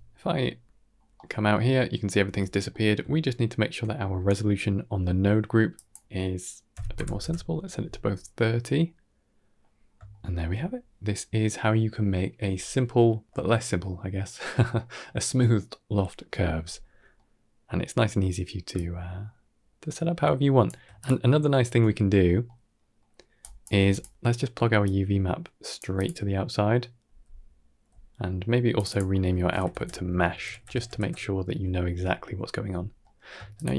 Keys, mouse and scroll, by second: 0.7 scroll down 4, 1.0 middle click, 2.1 Tab, 2.6 middle click, 3.0 ctrl+middle click, 3.7 middle click, 4.2 n, 5.6-7.1 drag, 8.1-9.5 middle drag, 9.7 scroll down 2, 10.0 shift+middle drag, 17.0-17.8 middle drag, 18.7-20.5 shift+drag, 20.9 click, 21.5 Tab, 22.0 scroll down 3, 22.3 middle click, 22.9 middle click, 23.4 click, 23.6 g, 24.7 click, 25.8 click, 26.9 n, 28.7 click, 30.4 BackSpace, 31.8 Tab, 32.4 n, 32.9 middle click, 33.4 ctrl+shift+click.